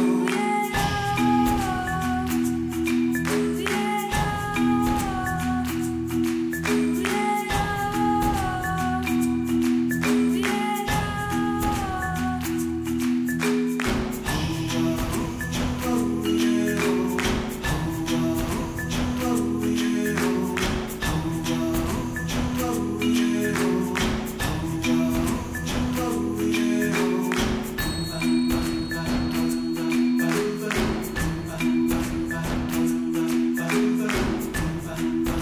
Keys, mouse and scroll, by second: 4.8 KP_1, 5.3 Tab, 5.4 middle click, 5.8 3, 5.8 click, 6.3 i, 7.1 middle click, 7.6 e, 8.1 ctrl+z, 8.3-8.7 scroll up 2, 8.7 s, 9.3 i, 10.0 g, 11.3 Tab, 11.5 middle click, 11.6 scroll up 2, 11.7 Tab, 11.8 middle click, 13.1 Tab, 13.4 ctrl+s, 13.6-14.2 middle drag, 14.2 KP_1, 14.3 scroll down 2, 14.5-15.1 shift+middle drag, 15.1 ., 15.9 click, 16.1-17.1 right drag, 17.6 shift+s, 18.5 click, 18.9 ., 20.7 t, 21.4 Tab, 21.6 a, 22.3-24.3 drag, 24.6-29.3 drag, 34.2 Tab, 34.5-35.4 middle drag.